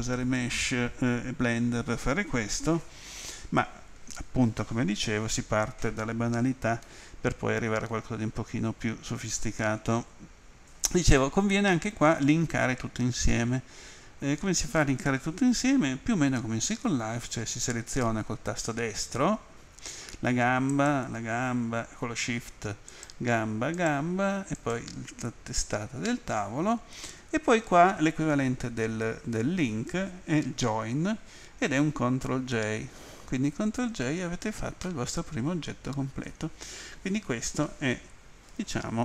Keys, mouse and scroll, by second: 6.8 middle click, 13.3 middle click, 20.7 shift+right click, 22.9 shift+right click, 23.8 shift+right click, 24.6 shift+right click, 34.4 middle click, 38.3-39.0 scroll down 2.